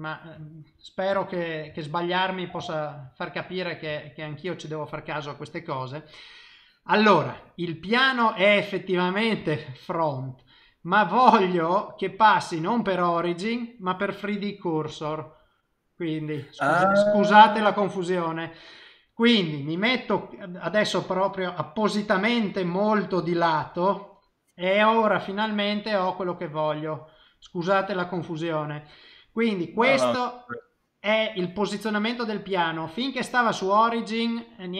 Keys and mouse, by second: 0.4 shift+middle click, 0.8 middle click, 1.5 ctrl+middle click, 1.8 shift+middle click, 2.6 ctrl+middle click, 3.1 middle click, 3.9 shift+middle click, 7.4 click, 12.2 click, 17.9 middle click, 19.0 middle click, 20.4 click, 21.7 click, 22.4 click, 22.9 click, 23.2 click, 23.8 middle click, 25.2 click, 25.7 click, 26.2 middle click, 27.7 click, 28.2 click, 28.7 middle click, 30.5 click.